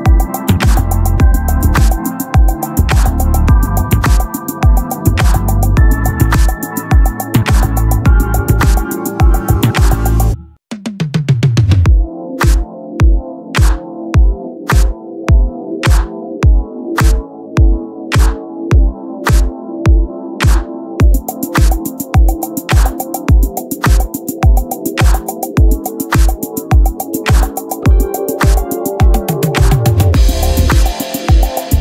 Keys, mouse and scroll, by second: 1.8-4.7 middle drag, 4.7 s, 7.8 middle click, 12.0 right click, 12.2 Tab, 16.9 KP_1, 17.5 z, 18.3 KP_Divide, 20.6-21.7 drag, 21.0 z, 21.9 KP_Divide, 23.6 click, 23.8 c, 26.6-27.7 middle drag, 27.7 KP_1, 30.3-31.6 right drag, 31.6 b.